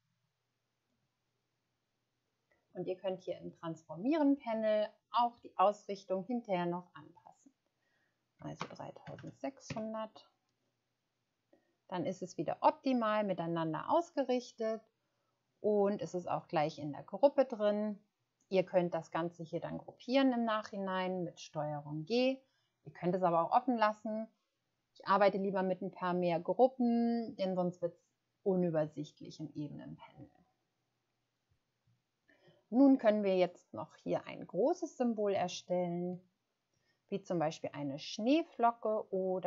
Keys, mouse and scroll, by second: 8.3-9.2 typing, 9.7 Return, 33.4-34.0 scroll down 1, 35.6 shift+scroll down 1.